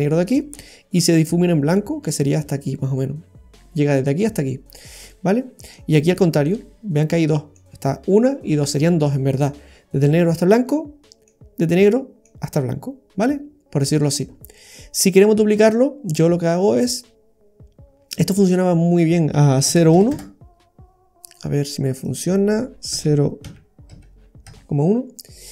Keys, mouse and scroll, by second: 5.1 middle click, 6.5 middle click, 8.7 middle click, 10.7 middle click, 11.8 middle click, 14.2-14.5 scroll down 2, 14.5 middle click, 15.5 click, 18.3 click, 21.2 click, 22.0 click.